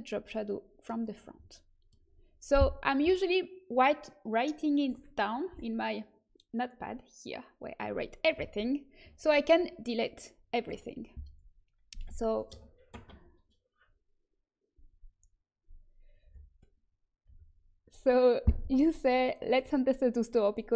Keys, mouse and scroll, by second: 0.3-1.3 right drag.